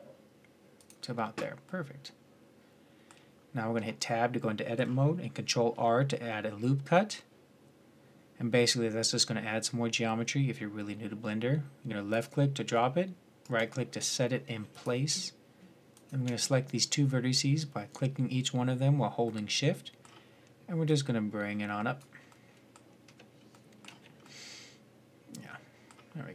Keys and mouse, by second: 3.6 Tab, 5.3 ctrl+r, 14.5-17.6 drag, 17.6-19.1 middle drag, 20.7 middle click, 21.0-22.2 drag, 22.2 middle click, 22.9 Tab, 23.6 z.